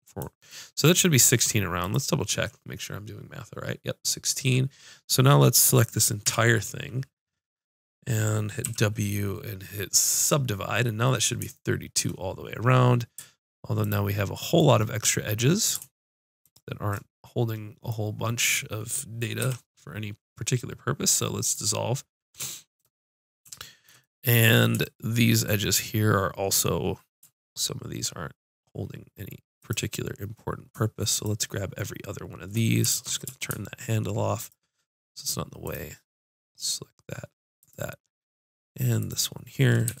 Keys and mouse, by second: 1.8-4.3 drag, 4.5-6.3 middle drag, 6.3-8.5 drag, 6.3 l, 8.6 w, 10.1-11.9 drag, 13.6 middle click, 13.8-15.0 drag, 15.0-16.4 middle drag, 16.4 click, 17.0 middle click, 17.1 click, 17.5 middle click, 18.2 middle click, 19.4 x, 29.6-32.9 drag, 32.9 ctrl+space, 34.4-40.0 drag, 39.9 x.